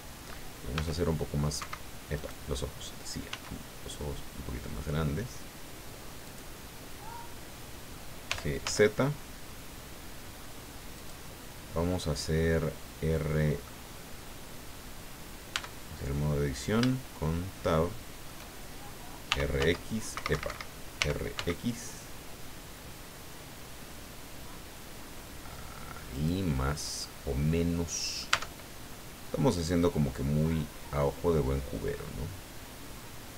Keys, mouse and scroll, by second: 0.7 s, 1.6 Escape, 2.2 right click, 3.3 s, 6.3 click, 8.3 g, 8.6 z, 11.0 click, 11.9 scroll down 2, 12.4-13.7 drag, 15.5 Tab, 16.2-16.5 scroll up 4, 16.9-18.4 shift+middle drag, 19.3 r, 19.6 z, 20.1 Escape, 21.0 r, 21.3 x, 26.1 click, 26.7 scroll down 1, 27.0-28.4 drag, 28.3 Tab, 29.8-33.3 drag.